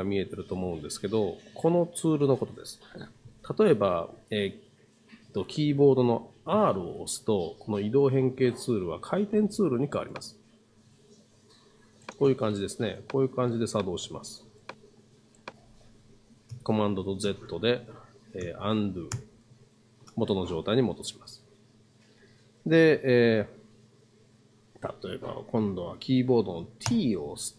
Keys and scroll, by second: 6.5 r, 17.2 super+z, 18.4 super+z, 26.9 t.